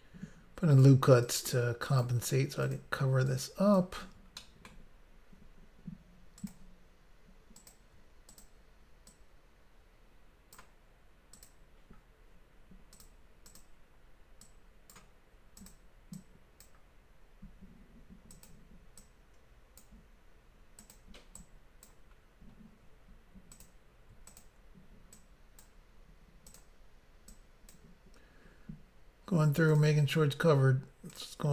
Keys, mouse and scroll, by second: 1.3 click, 2.7 click, 2.8 click, 3.3 click, 4.4 shift+middle click, 6.4 click, 6.6 click, 7.6 click, 7.7 click, 8.3 shift+click, 8.5 shift+click, 9.1 click, 11.4 click, 11.5 click, 13.1 click, 13.5 click, 13.6 click, 14.5 click, 15.6 click, 15.7 click, 16.2 click, 18.4 click, 18.5 click, 19.0 click, 20.9 click, 21.0 click, 21.4 click, 22.2 scroll down 1, 23.6 click, 23.7 click, 24.4 shift+click, 24.5 shift+click, 25.2 click, 26.6 click, 26.7 click, 27.4 click, 29.8 click, 29.9 click, 31.3 click.